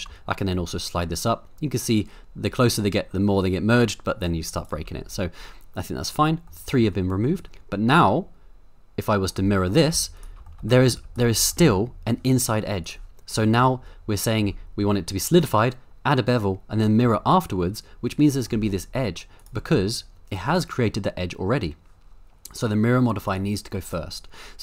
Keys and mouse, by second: 0.5-4.5 shift+drag, 6.5 middle click, 9.3 click, 9.9 z, 10.6 middle click, 10.7 middle click, 10.9 z, 11.4 middle click, 11.6 Tab, 12.8 click, 13.4-14.5 middle drag, 17.2-18.5 middle drag, 19.4 click, 19.7-20.4 middle drag, 23.3 click.